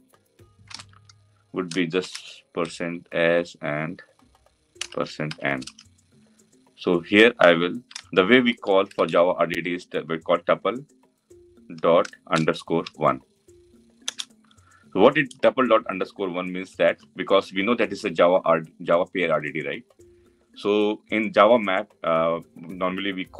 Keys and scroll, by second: 13.8 Return, 17.9 Return.